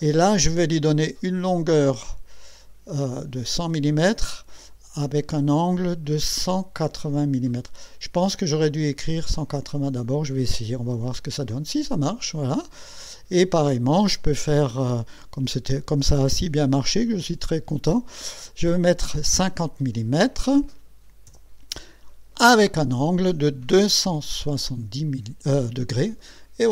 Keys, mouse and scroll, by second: 6.7 KP_1, 9.5 KP_8, 10.4 KP_0, 10.9 KP_Enter, 19.3 KP_5, 21.3 KP_0, 22.5 BackSpace, 23.7 KP_2, 24.1 KP_7, 24.5 KP_0, 25.2 KP_Enter.